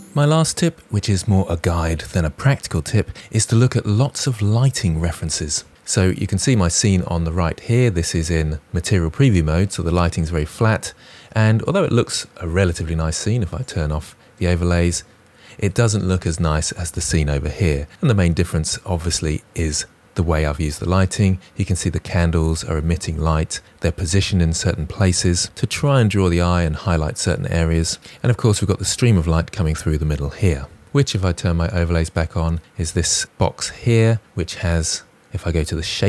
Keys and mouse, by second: 8.3 click, 13.5 click, 31.6 click, 33.9 click.